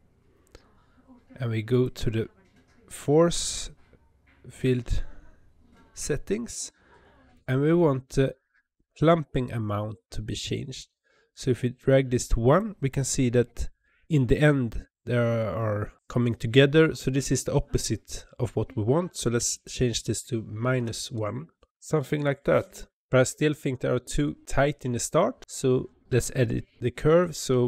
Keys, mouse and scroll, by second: 1.6 click, 10.6-13.7 drag, 19.4-21.8 drag.